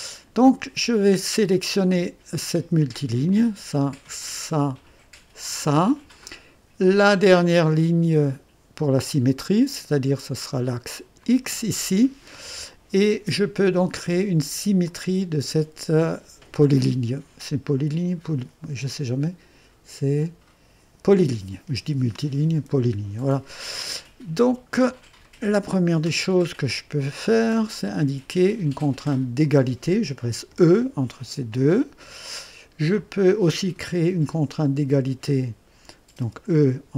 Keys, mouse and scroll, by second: 3.2 click, 4.4 click, 5.5 click, 11.2 click, 14.8 click, 25.2 right click, 26.0 click, 27.7 click, 29.4 click, 30.5 e, 36.2 click, 36.2 e.